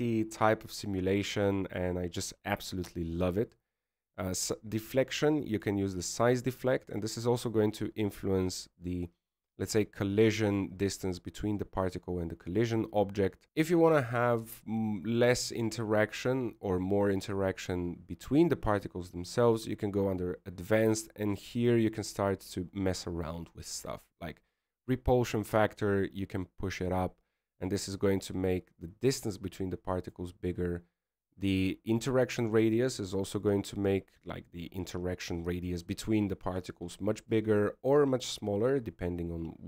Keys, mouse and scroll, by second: 0.4 KP_1, 5.5 click, 7.6 click, 13.5 click, 13.5-13.8 scroll down 6, 13.8 click, 14.4 click, 22.9 click, 33.6 click.